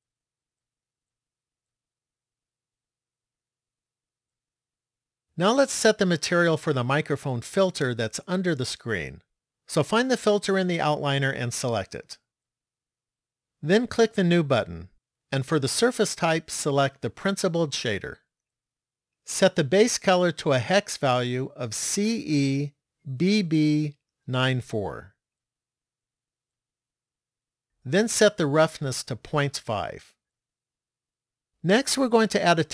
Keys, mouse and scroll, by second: 3.7 middle click, 10.1 click, 12.3 click, 14.2 click, 15.6 click, 19.9 click, 23.3 b, 28.6 click.